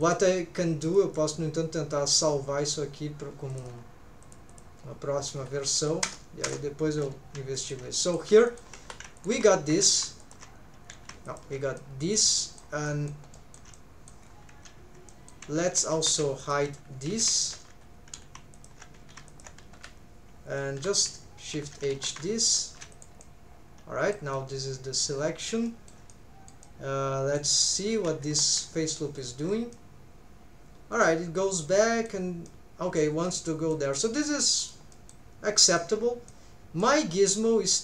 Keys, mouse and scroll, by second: 0.0-1.2 drag, 7.5 shift+middle click, 7.9 middle click, 8.5 shift+middle click, 9.2 alt+shift+click, 9.9 alt+a, 10.2 alt+shift+click, 11.0 alt+a, 11.3 alt+shift+click, 11.8 middle click, 12.4 shift+middle click, 12.9 shift+middle click, 13.3 shift+middle click, 13.7 middle click, 14.3 scroll down 2, 15.1 shift+middle click, 15.7 alt+a, 16.0 3, 16.4 alt+shift+click, 17.3 alt+a, 17.4 alt+shift+click, 18.5 alt+shift+click, 19.0 alt+a, 19.3 alt+shift+click, 19.8 h, 20.8 l, 21.5 shift+h, 21.9 shift+`, 23.2 middle click, 24.3-25.5 middle drag, 25.7 shift+middle click, 26.1 middle click, 26.6 middle click, 27.6 middle click, 27.9 alt+a, 28.3 3, 29.2 alt+shift+click, 29.7-32.1 middle drag, 32.4 middle click, 33.2 middle click, 33.9 middle click, 34.4 middle click, 34.9 middle click, 35.6 shift+middle click, 36.3 middle click, 37.1 scroll up 1, 37.4-37.8 middle drag.